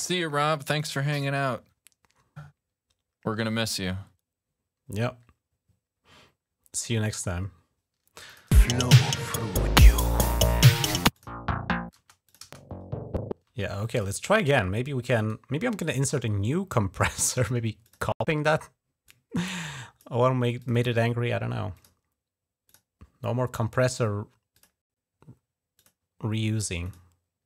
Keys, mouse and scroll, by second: 0.6 click, 1.0 alt+1, 8.1 click, 8.4 space, 10.9 click, 11.8 space, 12.1 click, 12.3 space, 13.3 space, 13.8 click, 15.0 right click, 17.7 click, 18.9 click, 20.4 click, 20.5 click, 21.5 click, 22.5 click, 24.3 click, 25.6 click, 26.6 click.